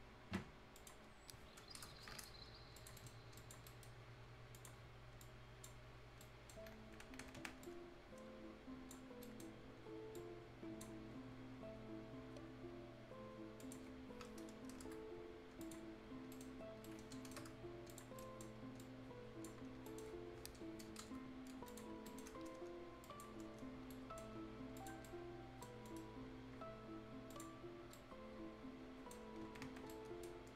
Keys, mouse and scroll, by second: 0.8 click, 0.8 click, 1.1-1.8 scroll down 1, 1.8 Return, 2.1-2.5 scroll up 1, 2.8 click, 3.0 shift+right click, 3.4 click, 3.7 right click, 4.0 scroll up 1, 4.6 click, 4.8 scroll up 1, 5.2 click, 6.1 scroll up 1, 6.2 right click, 6.9-7.4 scroll down 1, 7.4 scroll up 1, 7.6-9.1 drag, 9.1-9.8 scroll up 2, 9.2 right click, 10.2-13.4 drag, 13.6 click, 14.0-14.8 scroll down 1, 14.8 Return, 15.0 scroll up 1, 15.6 click, 15.9-16.3 scroll down 1, 16.3 right click, 16.7 scroll down 1, 16.9 right click, 17.4 Return, 17.7 scroll up 1, 17.9 click, 18.2 right click, 18.6 scroll up 1, 18.8 click, 19.6 scroll down 1, 19.9 right click, 21.0 Return, 21.7 click, 21.7 click, 21.9 scroll down 1, 22.1 right click, 23.1 click, 23.5 scroll down 1, 23.9 right click, 24.3 scroll up 1, 24.8 click, 25.1 right click, 25.8 scroll up 1, 25.9 middle click, 27.3 click, 27.8 scroll down 1, 28.3 right click, 29.1 scroll down 1, 29.9 right click, 30.5 scroll up 1.